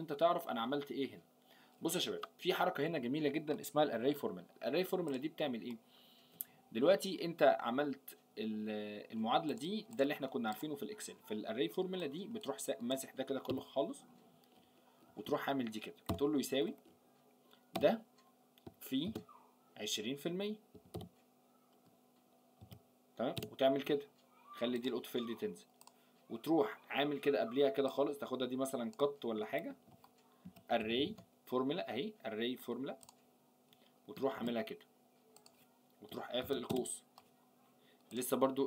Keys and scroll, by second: 29.7 ctrl+x, 34.3 ctrl+v.